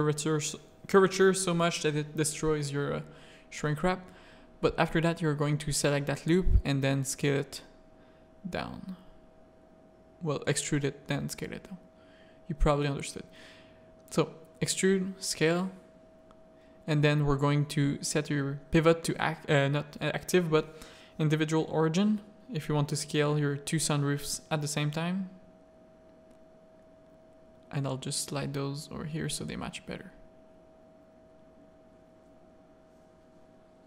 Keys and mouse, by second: 0.3 middle click, 1.0 z, 1.2 a, 1.4 middle click, 2.5 z, 3.2 e, 3.9 s, 6.4 z, 8.2-10.3 drag, 10.5 Tab, 10.7 middle click, 11.0 Tab, 11.1 a, 11.7 alt+click, 12.2 shift+middle click, 12.7 e, 13.1 s, 14.4 click, 15.1 Tab, 15.8 click, 16.4 Tab, 16.6 a, 17.5 s, 19.6 click, 20.4 s, 21.9 z, 22.9-24.6 drag, 24.9 z, 25.2 a, 26.0 z, 26.3 g, 28.3 Tab, 28.8 alt+a, 28.9 drag, 29.3 z.